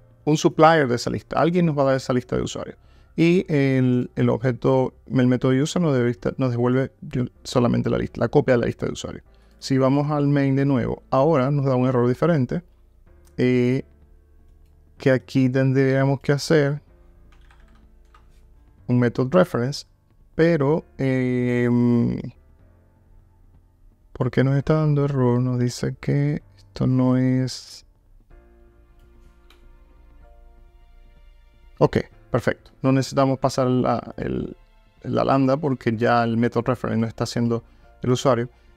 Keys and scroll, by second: 18.1 Return.